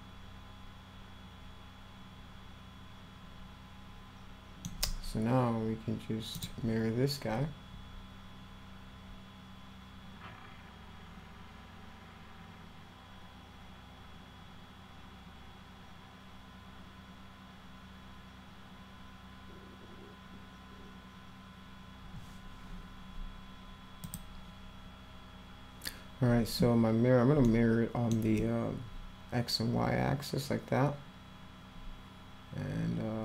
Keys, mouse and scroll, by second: 6.3 click, 24.0 click, 26.7 space, 27.5 middle click.